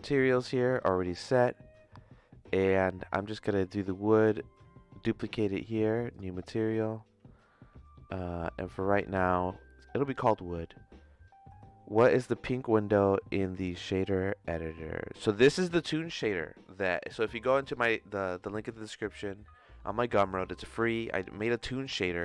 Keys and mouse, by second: 6.1 click, 15.3 click, 20.9 middle click.